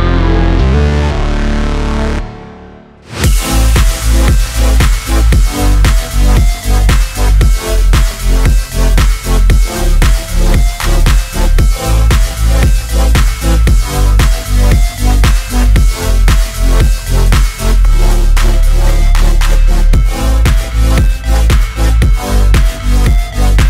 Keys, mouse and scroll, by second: 6.8 click, 7.1 scroll down 1, 10.2 scroll up 1, 11.3 click, 13.1-18.0 drag, 19.6 space.